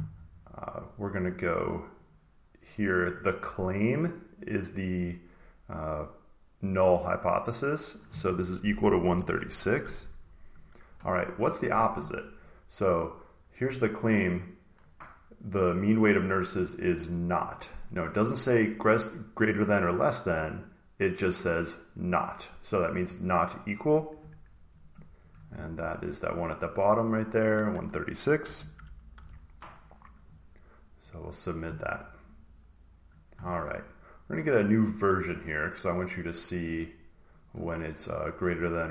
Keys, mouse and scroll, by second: 1.1 click, 2.0 click, 2.7 click, 3.9 click, 7.7 click, 8.7-9.7 typing, 10.5 click, 15.2 click, 17.4 click, 17.5 click, 24.7 click, 25.2 click, 26.9 click, 27.5 click, 28.1-29.5 typing, 29.6 click, 31.0 click, 32.9 click, 35.6 scroll down 2, 35.7 scroll, 35.8-36.5 scroll down 2, 36.5-37.3 scroll down 1, 37.3 click, 37.8 scroll, 38.0-38.9 scroll down 2.